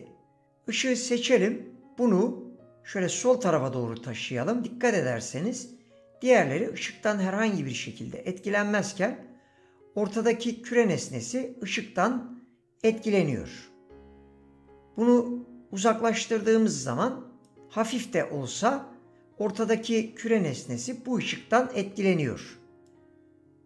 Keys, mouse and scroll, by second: 0.7 click, 22.8 click.